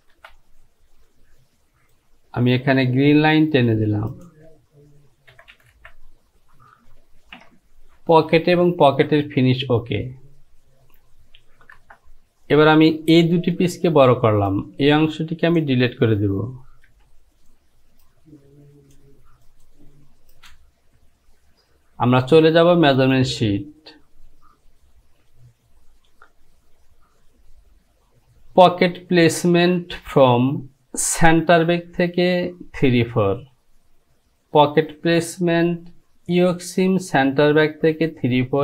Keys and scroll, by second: 0.2 Home, 5.4 j, 5.6 j, 5.8 j, 11.9 Return, 17.1 Delete.